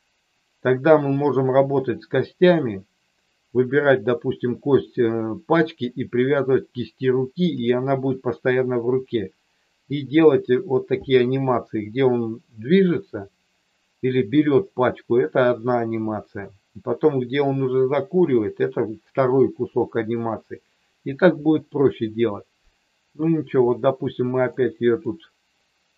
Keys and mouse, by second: 24.4 middle click.